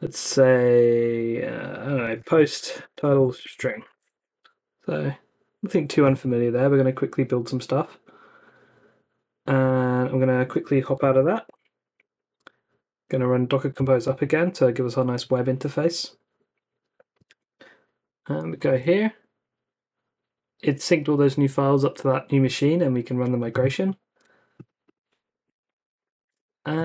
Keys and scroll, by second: 1.9-4.4 typing, 10.4-11.7 typing, 12.7 Up, 13.6 Return, 17.2 super+Tab, 18.6 super+r, 25.2-26.7 typing.